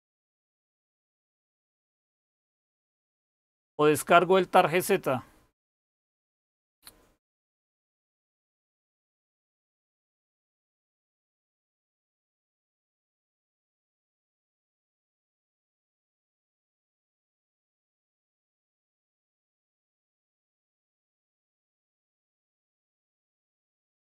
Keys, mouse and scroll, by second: 4.5-5.6 scroll up 1, 5.6-8.8 scroll up 1, 8.8-9.3 scroll up 1, 9.3-10.9 scroll up 1, 10.9-14.4 scroll up 1, 14.4-15.8 scroll up 1, 15.8-16.8 scroll up 1, 16.8-17.9 scroll up 1, 17.9-19.7 scroll up 1, 19.7-24.0 scroll up 1.